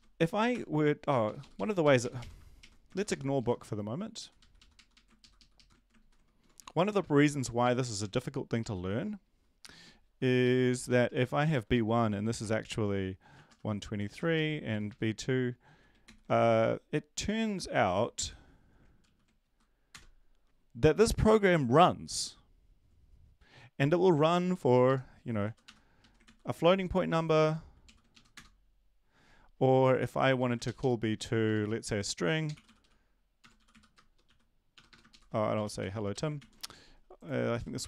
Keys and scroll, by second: 1.2 Up, 1.2 typing, 1.4 Up, 1.8 Right, 2.6 ctrl+shift+Right, 2.9 ctrl+shift+Left, 5.2 ctrl+shift+Left, 5.4 ctrl+shift+Left, 5.5 ctrl+shift+Left, 6.0 ctrl+shift+Right, 6.4 \, 6.5 |, 8.2 Down, 8.6 Left, 9.6 Right, 10.0 shift+Up, 10.4 shift+Right, 10.7 Down, 10.8 Down, 11.0 Down, 11.5 Right, 11.7 Right, 13.7-14.5 typing, 14.7 Right, 14.8 Right, 15.1 Right, 15.7 Down, 16.0 ctrl+s, 19.0 ctrl+l, 19.4 Up, 19.9 Return, 24.8 Left, 25.7-26.5 typing, 27.8 ctrl+l, 28.1 Up, 28.3 Return, 30.4 Left, 31.5-36.3 typing, 35.1 ctrl+shift+Left, 36.4 ctrl+s, 37.6 Up.